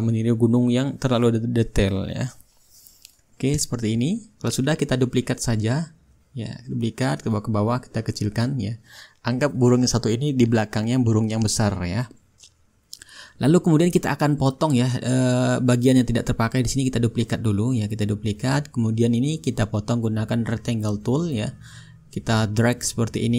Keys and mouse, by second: 2.1-3.4 shift+middle drag, 3.4 click, 3.4 right click, 4.2-11.7 drag, 5.8-14.2 right drag, 11.8-14.2 drag, 15.5-18.1 drag, 16.1-18.1 right drag, 20.7-21.8 drag, 23.1-23.3 drag.